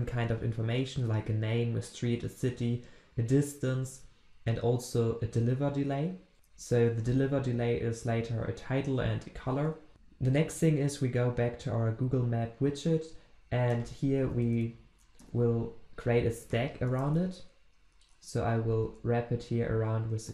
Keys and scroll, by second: 6.3 ctrl+b, 14.2 alt+Return.